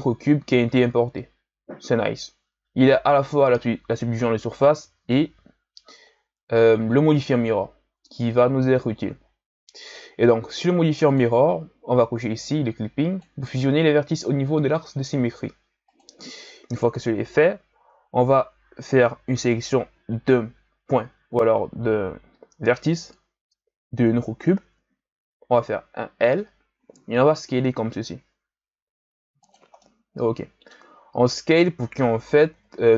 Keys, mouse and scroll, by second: 11.1-13.2 drag, 15.8 click, 16.4-19.5 shift+scroll up 3, 19.5 right click, 25.4 l, 27.5 s, 29.8-32.5 middle drag, 32.5 KP_1.